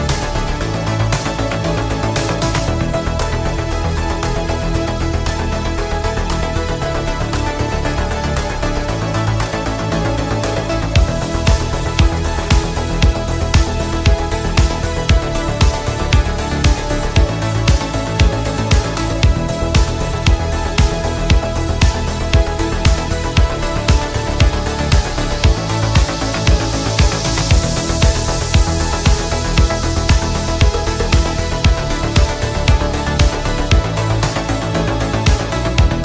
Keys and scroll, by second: 11.9 ctrl+z.